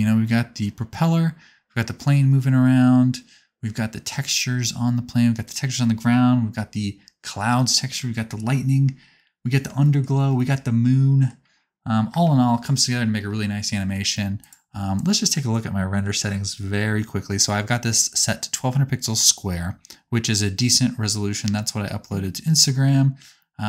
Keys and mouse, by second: 12.1 space, 12.3-15.2 drag, 15.2-23.6 middle drag.